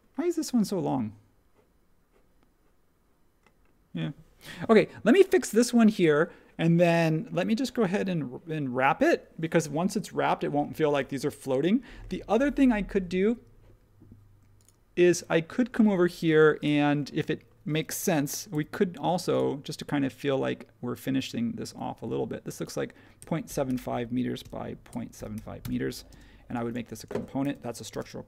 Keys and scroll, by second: 16.3 space, 22.9-25.6 typing, 27.4 shift+g, 27.9 Return.